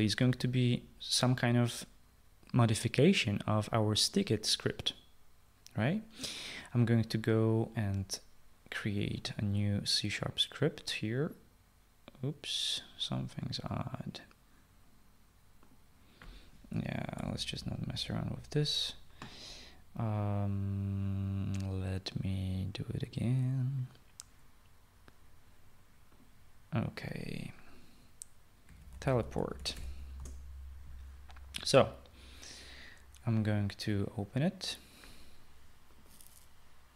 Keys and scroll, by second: 18.2 Delete, 29.5-31.3 typing.